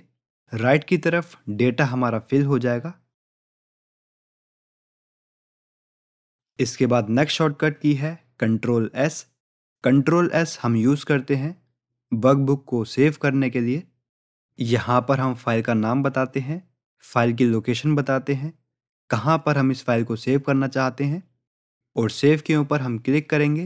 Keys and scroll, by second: 2.4 ctrl+r, 11.4 ctrl+s.